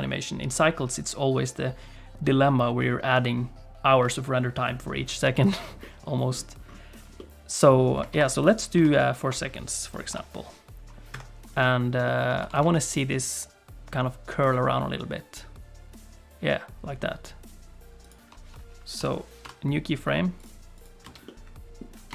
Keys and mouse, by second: 5.8 middle click, 7.2 click, 8.1 ctrl+t, 8.8 ctrl+t, 10.1 i, 11.5 middle click, 12.0 shift+middle click, 12.4 r, 20.8 click, 21.0 space, 21.2 middle click.